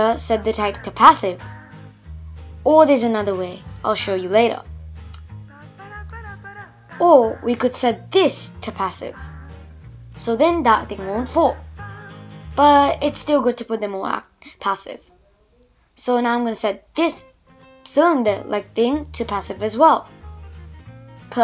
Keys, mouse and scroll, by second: 1.7 space, 2.9 space, 3.5 shift+Left, 4.2 click, 5.4-6.6 drag, 6.9-9.9 drag, 11.8 click, 13.0-15.5 drag, 15.5 space, 16.0-17.8 middle drag, 17.8 space, 18.9 shift+Left, 19.7-20.1 scroll up 3, 20.1-21.4 middle drag.